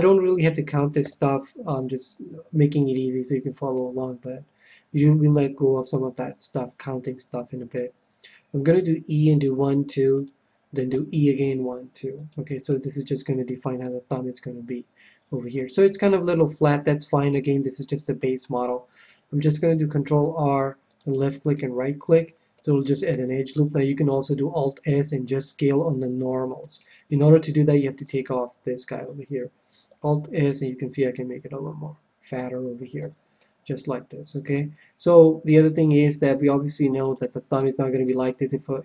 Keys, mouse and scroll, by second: 0.8 click, 1.0 KP_7, 2.0-4.7 middle drag, 8.7 e, 10.2-12.1 drag, 10.9 e, 12.3-13.9 drag, 12.8-15.5 middle drag, 15.7-19.4 middle drag, 19.7 ctrl+r, 21.5-23.1 right drag, 22.5-24.3 middle drag, 24.6 alt+s, 26.7-28.6 right drag, 28.0-29.6 drag, 29.8 alt+s, 33.0 click, 33.0 a, 33.4-35.0 middle drag, 37.0-38.7 drag, 37.5-38.8 middle drag.